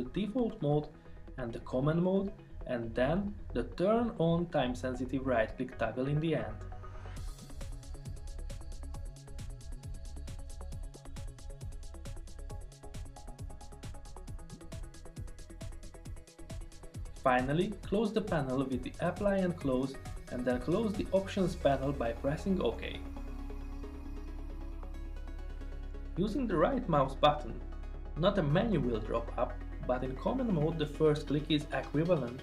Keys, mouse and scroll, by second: 18.4 click, 22.7 click.